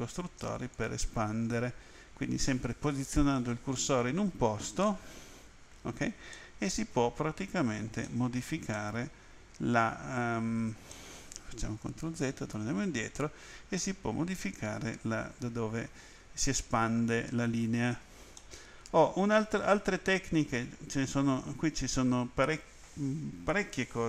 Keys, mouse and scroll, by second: 0.7 ctrl+click, 6.3 middle click, 8.1 middle click, 8.8 middle click, 10.9 middle click, 12.1 ctrl+z, 13.8 middle click, 18.4 middle click.